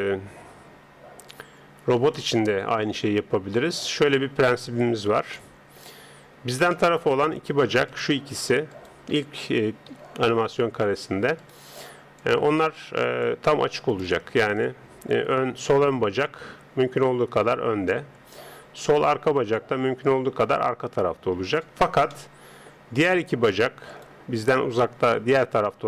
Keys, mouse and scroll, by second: 1.1-3.6 middle drag, 3.6 KP_3, 5.3-8.7 middle drag, 7.9-10.5 right drag, 9.9 KP_3, 11.4 right click, 12.2 click, 13.9 right click, 18.9 right click, 19.5 click, 22.1-23.9 middle drag, 23.9 right click.